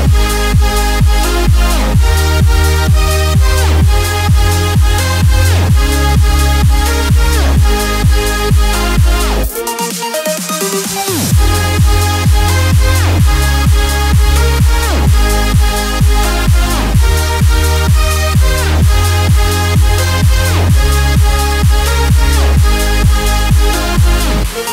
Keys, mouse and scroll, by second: 0.5-7.2 drag, 7.2 t, 7.9 click, 9.2 ctrl+t, 10.4 ctrl+t, 11.8-19.4 drag, 16.3 Down, 19.7 space, 19.9 click, 20.2 space.